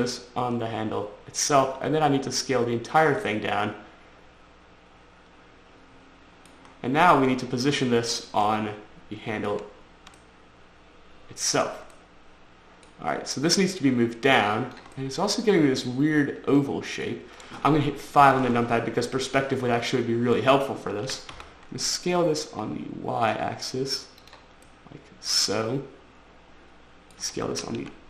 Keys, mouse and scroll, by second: 0.0 click, 2.1 s, 3.3 click, 3.4 click, 3.6 middle click, 7.0-7.5 scroll up 4, 8.1 middle click, 8.8 shift+middle click, 9.8 middle click, 10.5 shift+middle click, 12.3 middle click, 12.5 scroll up 1, 13.8 click, 15.3 middle click, 18.5 5, 19.1 scroll up 4, 19.5 scroll down 4, 21.4-21.7 typing, 24.6 click, 25.0 middle click, 27.6 s, 27.9 z.